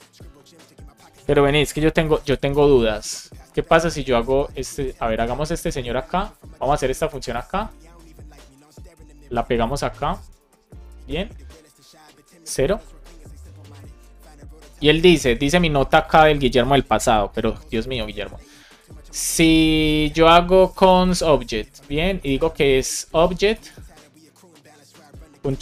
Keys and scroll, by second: 1.5 super+space, 2.4 Return, 8.0 super+Right, 8.3 shift+super+Left, 8.5 super+c, 10.7 super+v, 11.6 BackSpace, 13.7 BackSpace, 15.0 BackSpace, 15.8 BackSpace, 17.7 Return, 20.8-24.0 typing.